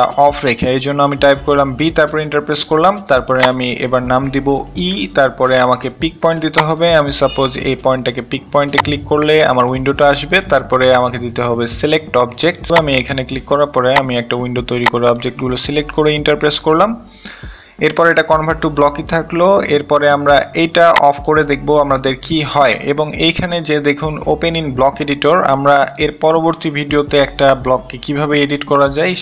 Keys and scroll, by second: 2.0-2.8 typing, 3.9 e.